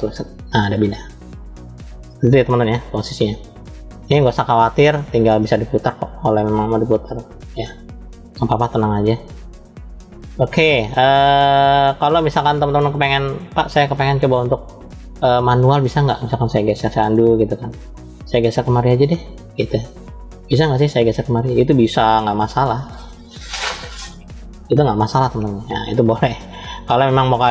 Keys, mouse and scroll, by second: 0.9-3.9 middle drag, 4.9 click, 6.2-8.2 drag, 8.5 ctrl+z, 9.5-11.4 middle drag, 14.6 click, 16.6 ctrl+z, 17.9 middle click, 19.5 click, 20.9-22.0 drag, 22.4 click, 25.2-26.5 middle drag, 26.6-27.4 scroll up 2, 27.4 scroll up 1.